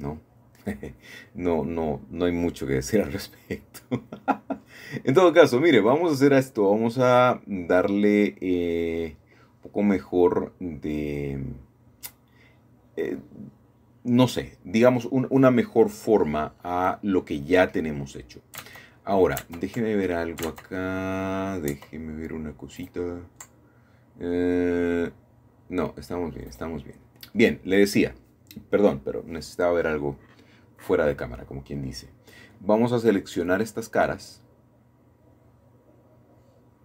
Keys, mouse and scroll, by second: 0.0 click, 0.4 scroll up 1, 0.6-1.6 scroll down 2, 1.8 scroll down 2, 2.0-2.3 scroll up 2, 2.3-2.7 scroll down 2, 2.7 scroll up 2, 3.0-3.8 scroll down 2, 3.8-4.9 shift+middle drag, 4.9-5.8 scroll up 1, 5.8-7.3 shift+middle drag, 7.8-10.5 scroll down 5, 10.5 middle click, 12.9-15.7 middle drag, 16.0-17.0 scroll up 3, 16.6 shift+middle click, 17.8-18.5 scroll up 2, 19.2-20.5 shift+scroll down 2, 20.6-22.0 shift+middle drag, 22.7-23.8 middle drag, 24.7-25.2 scroll up 2, 25.2 shift+middle click, 25.5 shift+middle click, 27.7 3, 29.1 a, 29.2 a, 29.8 c, 31.0-35.0 drag, 35.8 Escape, 36.2-36.8 scroll down 2, 36.4 middle click.